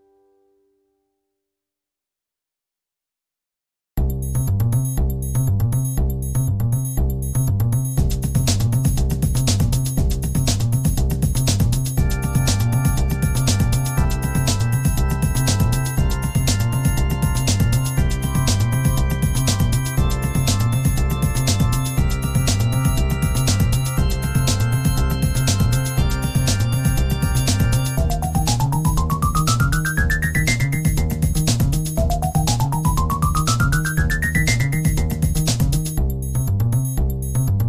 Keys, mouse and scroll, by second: 3.7-10.2 drag, 11.6-14.9 drag, 15.3-17.2 drag, 18.8-22.5 drag, 23.1 click, 24.6-27.3 drag, 28.2-29.8 drag, 34.4 click.